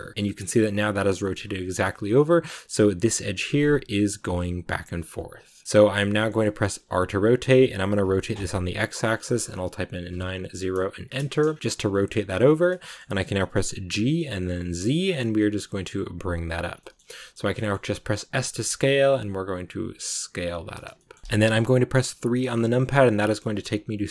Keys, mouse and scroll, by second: 0.1-5.6 shift+middle drag, 5.6 scroll down 2, 6.0 shift+middle click, 6.7 r, 11.4 scroll down 2, 11.6-13.8 shift+middle drag, 13.8 g, 16.7 middle click, 16.9-17.4 scroll up 1, 17.4 shift+middle click, 18.2 s, 20.8-22.1 shift+middle drag, 22.1 KP_3.